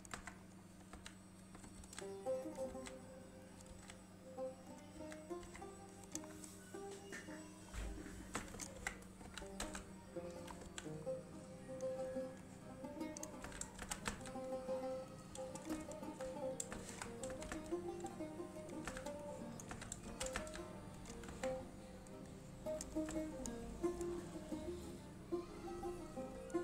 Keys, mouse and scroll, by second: 0.3 Tab, 0.5 scroll up 1, 0.7 middle click, 1.1 a, 1.9 alt+s, 2.6 right click, 2.9 alt+s, 3.6 right click, 3.8 alt+s, 4.8 click, 5.1 s, 5.5 click, 5.6 Tab, 5.8-6.2 scroll down 1, 6.2 click, 6.4 scroll down 1, 6.6 middle click, 7.8 scroll up 1, 8.7 click, 8.9 Tab, 9.4 a, 9.8 z, 10.4 middle click, 10.8 1, 11.1-11.7 scroll up 1, 12.5-13.5 click, 13.6-14.2 typing, 15.2 click, 17.0 alt+shift+click, 17.4 typing, 18.7 click, 19.0 z, 19.3-19.9 click, 19.8 z, 20.2 g, 20.5 z, 21.1 click, 21.4 Tab, 21.7-22.1 scroll down 1, 22.8 click, 23.3 shift+middle click.